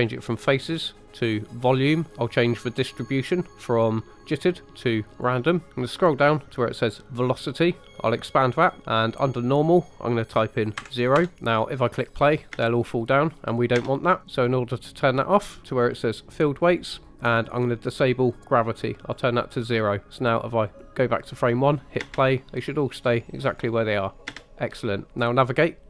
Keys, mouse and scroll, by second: 0.2-1.6 drag, 4.2-5.2 drag, 5.7-7.2 scroll down 3, 7.2 click, 8.6 scroll down 2, 9.5-11.1 drag, 12.5 space, 13.7 space, 14.3 click, 16.6 click, 18.2-19.2 drag, 20.6 click, 22.0 space, 24.3 space.